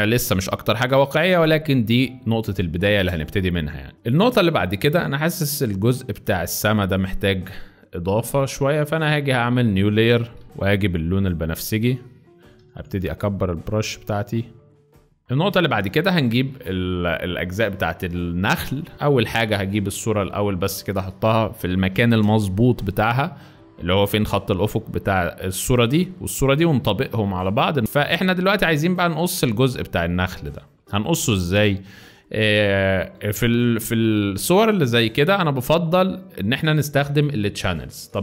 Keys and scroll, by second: 0.5 z, 2.5 space, 3.2 z, 4.2 space, 12.3 ], 12.6 ], 12.7 ], 12.9 ], 15.2 z, 15.8 space, 18.9 Return, 22.0 v, 27.8 Return, 30.1-33.2 typing.